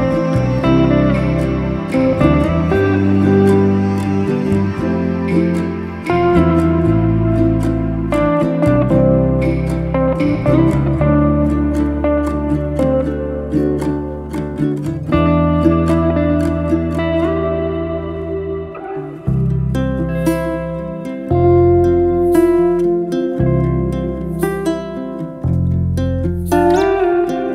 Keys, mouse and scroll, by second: 2.0 ctrl+z, 3.1 r, 4.4 z, 4.9 alt+d, 10.5 r, 11.7 z, 12.4 alt+d, 14.6 r, 16.0 z, 16.5 s, 18.2 alt+d, 20.4 r, 21.4 z, 21.8 s, 23.2 alt+d, 24.7-25.5 shift+middle drag, 25.5 r.